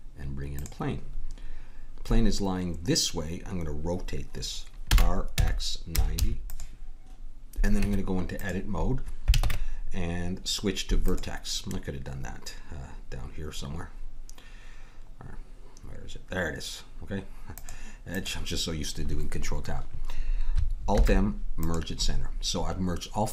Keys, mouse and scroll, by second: 4.9 r, 7.8 Tab, 9.4 ctrl+Tab, 17.5-20.9 drag, 20.9 alt+m, 22.5-23.3 middle drag.